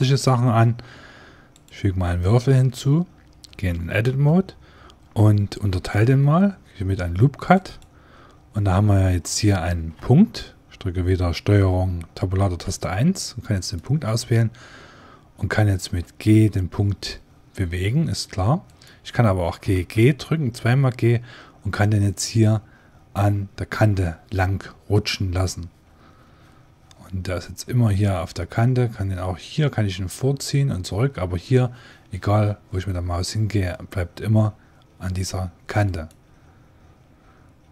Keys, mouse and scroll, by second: 0.2 shift+a, 2.1-5.2 drag, 3.5 Tab, 5.7 ctrl+r, 8.1-10.0 drag, 9.5 ctrl+Tab, 13.4-15.9 right drag, 15.9 g, 19.3 g.